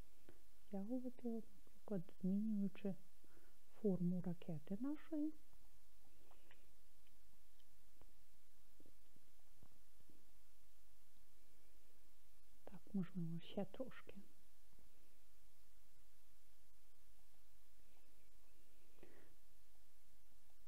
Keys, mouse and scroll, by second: 5.0 click, 7.4-11.2 middle drag, 15.5 s, 17.2 click, 19.7 click.